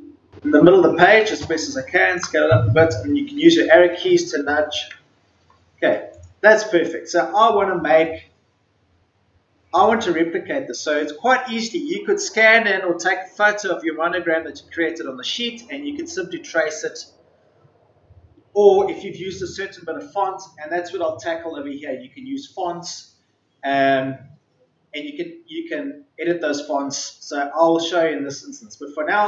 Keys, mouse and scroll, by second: 1.2 ctrl+shift+click, 3.3-4.5 typing, 6.0 click.